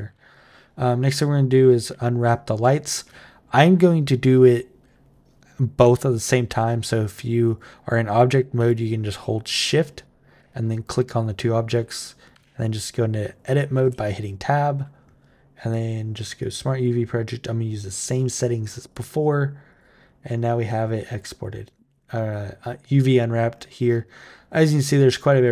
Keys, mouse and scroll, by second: 1.0 click, 2.4 shift+click, 5.6 Tab, 6.3 Tab, 7.3 click, 8.4 shift+click, 9.7 shift+click, 12.1 Tab, 13.6 a, 15.5 click, 16.2 click, 18.6 click, 19.5 click.